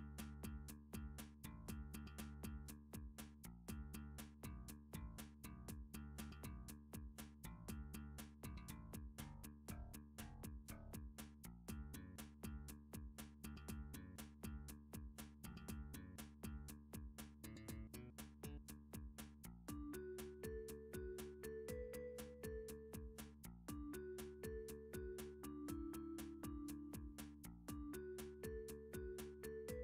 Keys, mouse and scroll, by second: 0.3 middle click, 1.4 1, 2.5 middle click, 3.4 middle click, 3.9 click, 4.9 g, 5.4 z, 6.5 click, 7.0 g, 7.2 middle click, 7.6 shift+middle click, 7.7 z, 7.8 g, 8.5 middle click, 8.9 click, 9.4 g, 10.0 z, 11.6 click, 11.9 g, 12.1 click, 12.7 g, 13.2 g, 14.0 click, 14.3 click, 15.0 g, 17.5 click, 18.1 middle click, 19.3 middle click, 20.3 click, 20.9 shift+click, 22.4 shift+middle click, 23.8 s, 24.3 z, 27.1 click, 28.5 s, 28.7 z, 29.4-29.8 drag, 29.4 s.